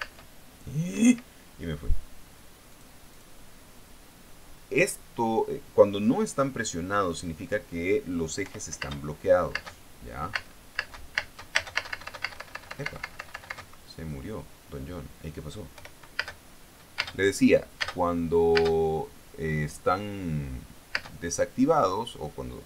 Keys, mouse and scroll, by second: 0.5 space, 1.4 Escape, 3.2 click, 3.6 click, 9.0 p, 9.3 space, 10.0 space, 10.9 space, 14.1 Escape, 16.3-19.1 typing, 21.5 space.